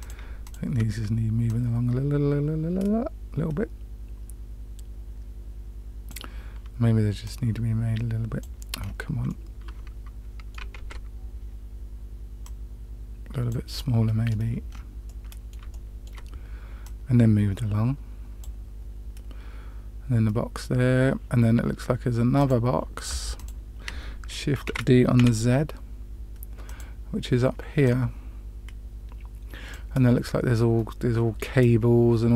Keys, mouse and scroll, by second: 0.4 shift+click, 1.4-6.0 drag, 7.2-8.4 drag, 8.7-9.2 scroll up 2, 9.2-10.5 middle drag, 10.7 ctrl+z, 12.3-13.5 drag, 13.7-14.2 middle drag, 14.6 scroll down 1, 15.0 middle click, 15.6-16.1 shift+middle drag, 16.7-18.4 drag, 22.3 click, 23.3 click, 24.6 shift+d, 27.8-29.7 drag.